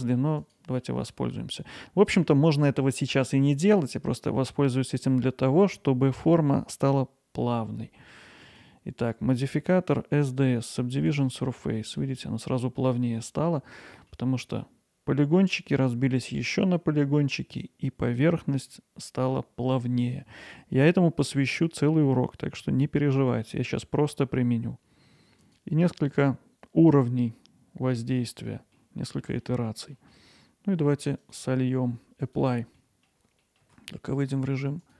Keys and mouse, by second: 0.4-0.8 drag, 0.8 middle drag, 1.3 alt+middle click, 2.6 Tab, 4.2 middle click, 8.4-11.8 drag, 11.8 middle click, 13.3 middle click, 14.0 middle click, 25.4-28.5 drag, 28.5 middle click, 29.4 middle click, 31.4-32.8 drag, 32.8 middle click, 33.4 middle click, 33.7 Tab, 34.8-34.9 drag.